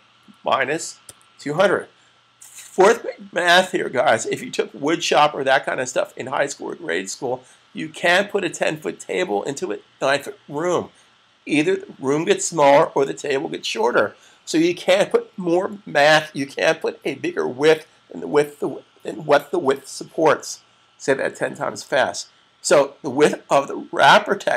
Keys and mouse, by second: 0.0-1.7 typing.